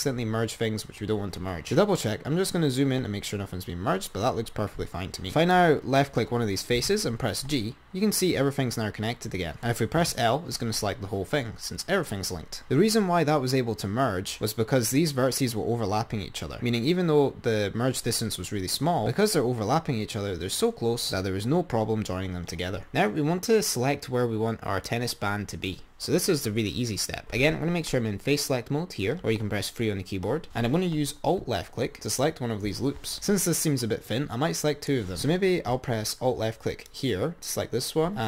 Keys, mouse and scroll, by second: 1.5-2.7 scroll up 10, 5.7 click, 7.0 g, 10.4 l, 12.7 click, 16.7-17.6 scroll up 5, 22.8 Left, 27.5 3, 32.4 alt+click, 36.9 alt+click.